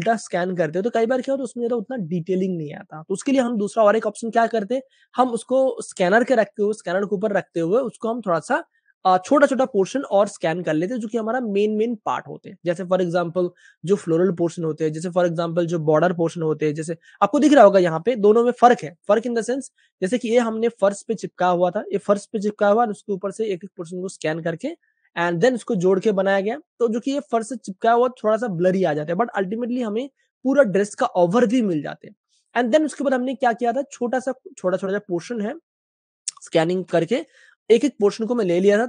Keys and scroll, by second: 1.5 super+space, 1.6 super+space, 6.6 super+space, 8.8 space, 10.4 super+space, 10.5 super+space, 14.9 space, 16.6 super+space, 23.2 space, 24.7 typing, 26.9 super+space, 27.0 super+space, 30.3 space, 33.8 typing, 38.7 super+space, 38.7 super+space.